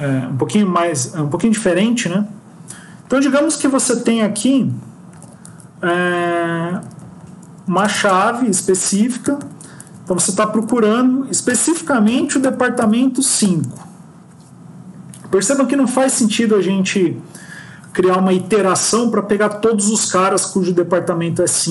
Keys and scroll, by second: 9.8 Left, 12.8 End.